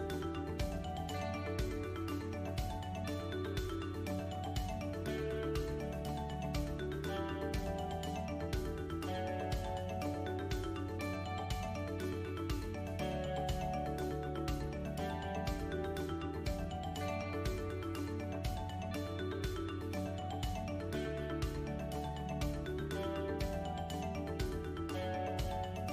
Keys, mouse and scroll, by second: 0.3 shift+click, 1.7 KP_1, 2.7 e, 4.4 middle click, 6.6 l, 8.4 a, 8.6 s, 11.1 g, 13.9 click, 15.4 g, 19.3 middle click, 20.4 Tab, 21.2 middle click, 21.8 scroll up 2, 22.2 shift+middle click, 23.0 middle click.